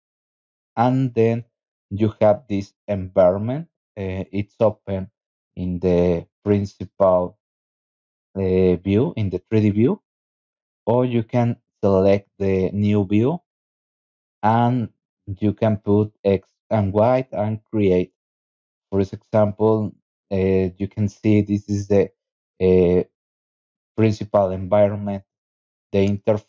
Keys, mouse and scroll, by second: 11.4 click, 13.6 click, 15.1 click, 15.6 click, 16.3 click, 18.1 click, 19.4 click, 20.4 scroll up 2, 22.8 right click, 24.1 click.